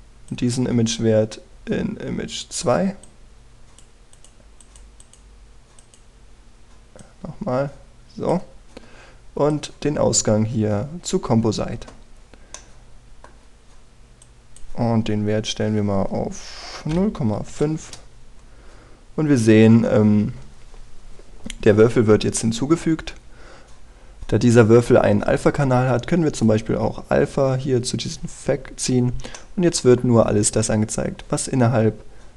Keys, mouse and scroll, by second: 1.0-12.4 drag, 13.2-14.3 middle drag, 14.9 click, 18.2 KP_5, 23.0 middle click, 23.8 click, 30.4 middle click.